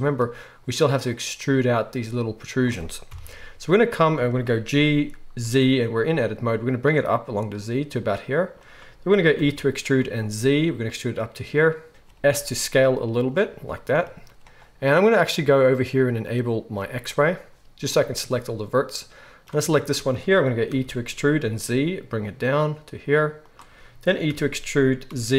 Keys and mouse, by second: 3.1 KP_1, 4.7 g, 9.4 e, 12.3 s, 16.8-23.5 drag, 20.7 e, 23.5-25.3 shift+middle drag, 24.3 e.